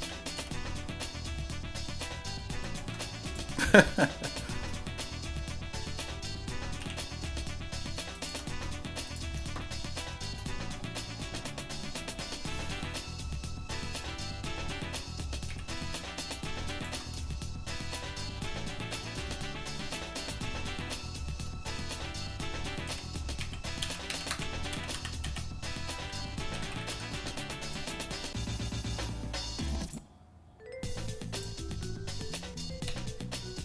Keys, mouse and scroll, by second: 0.3 g, 3.3 click, 4.1 shift+middle click, 6.8 e, 9.1 click, 9.6 shift+middle click, 15.5 e, 17.2-18.8 shift+middle drag, 19.2-20.4 shift+middle drag, 20.9 shift+middle click, 22.8 g, 28.5 shift+middle click, 29.8-31.6 drag, 33.1 g.